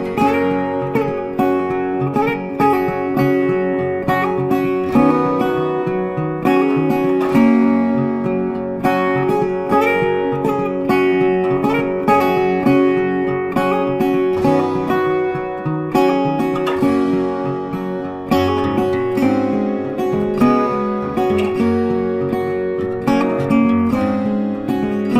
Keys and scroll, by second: 12.8 ctrl+t.